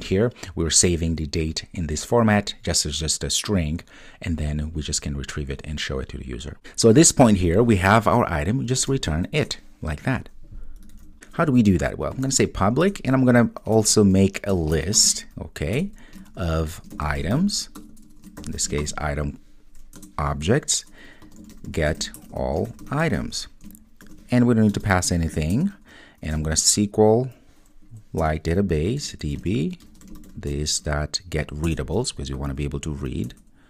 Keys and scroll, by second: 9.5 Return, 12.8 Return, 20.0 Return, 28.2 Return, 29.2 Return.